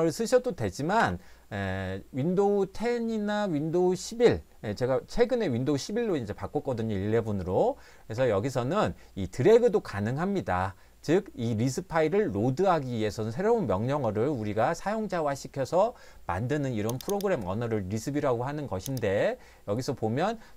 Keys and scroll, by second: 1.0 Escape.